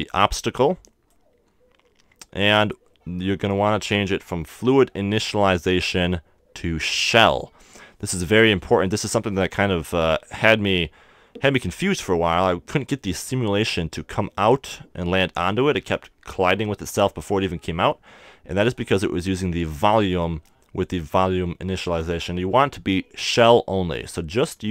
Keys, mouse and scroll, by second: 6.0-8.3 drag, 12.9-15.3 middle drag, 18.6-20.4 drag.